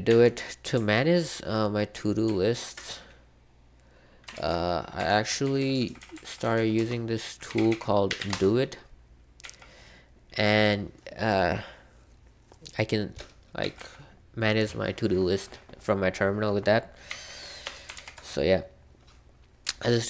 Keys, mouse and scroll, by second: 0.0 super+3, 0.7 super+1, 1.9 super+k, 2.2 super+k, 4.3 ctrl+b, 4.7-11.0 typing, 13.6 j, 17.0 typing, 17.9 ctrl+c.